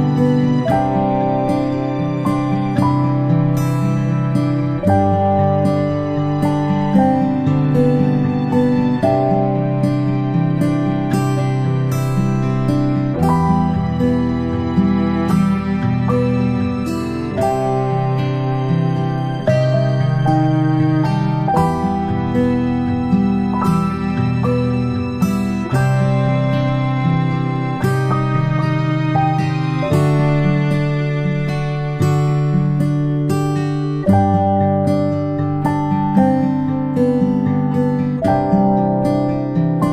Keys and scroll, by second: 0.3-21.8 space, 24.2 space, 25.2 space, 28.4-29.4 space, 32.0 space, 32.2 space, 32.2 space, 34.4 space, 36.4 space, 36.8 space.